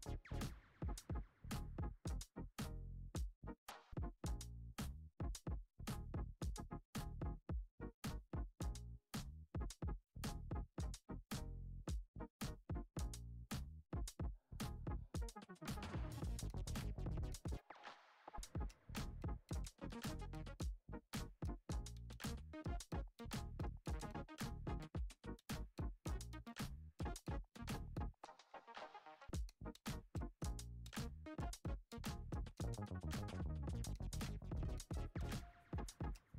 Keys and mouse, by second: 1.0-1.5 shift+middle drag, 2.4-3.1 middle drag, 4.9 F6, 6.6 shift+right click, 6.9 shift+a, 8.2 shift+middle drag, 8.9 g, 10.0 s, 11.7 Tab, 12.2 shift+middle click, 13.2 f, 14.4 e, 16.0-16.7 middle drag, 16.9 i, 18.1 e, 20.6 s, 21.9 i, 25.5 i, 27.7 e, 28.7 middle click, 29.4-29.7 shift+middle drag, 30.6 a, 31.5 KP_1, 32.4 g, 33.7 g, 35.8 middle click.